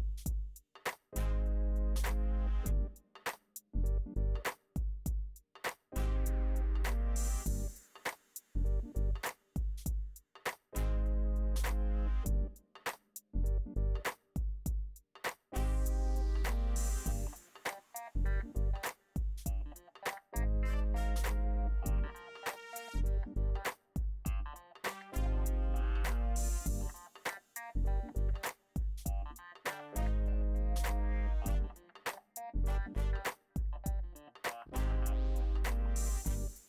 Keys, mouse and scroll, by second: 1.9 middle click, 2.2 click, 3.0 f, 3.1 f, 3.3 f, 4.3 f, 7.3-10.8 drag, 11.1 click, 12.4 click, 13.3 ctrl+x, 13.6-14.6 drag, 18.4 click, 18.5-19.6 middle drag, 19.9-21.1 drag, 21.1-22.3 middle drag, 22.8 middle click, 23.6 click, 24.2-25.4 middle drag, 25.4 click, 25.4 right click, 25.9 middle click, 26.6 click, 26.9 f, 27.1 click, 27.3 middle click, 27.9-30.6 drag, 31.6-32.7 drag, 32.5 f, 32.7-35.0 drag, 35.0 ctrl+z, 35.1-36.6 drag.